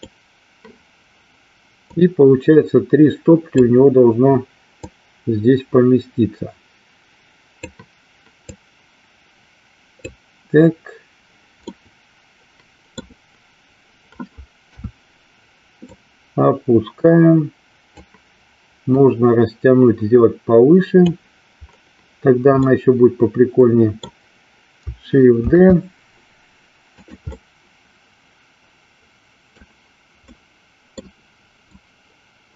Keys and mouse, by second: 1.8-3.7 drag, 4.8-7.7 drag, 8.6-10.2 drag, 11.7-13.1 middle drag, 14.6 KP_3, 15.9-18.1 drag, 18.8-21.1 drag, 22.7-24.1 middle drag, 27.4-29.7 middle drag, 30.4 middle click, 31.8-32.5 drag.